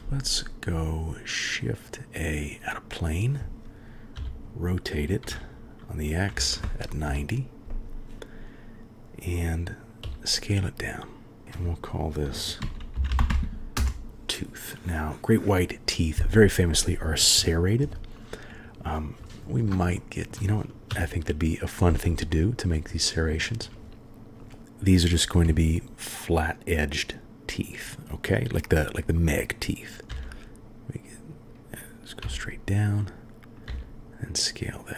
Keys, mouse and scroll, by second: 4.1 r, 10.0 s, 11.4 click, 12.3 shift+middle click, 12.8-13.8 drag, 13.1 o, 20.0 shift+click, 20.2 shift+middle click, 20.9 KP_1, 22.3 shift+click, 22.4 shift+middle click, 23.4 shift+click, 23.5 shift+middle click, 25.4 s, 30.1 e, 33.7 s.